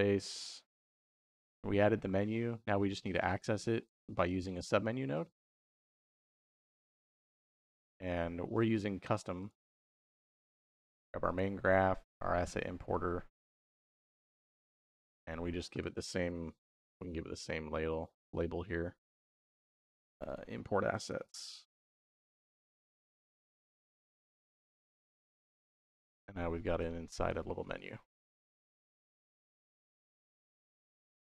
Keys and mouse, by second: 6.7 click, 7.6-9.3 drag, 9.8 click, 11.1 click, 12.8-13.6 drag, 15.6-20.0 drag, 20.1-23.9 drag, 22.6 s, 24.4-26.7 drag, 27.2 click, 28.3 click, 29.3-30.1 drag, 30.5-31.3 drag.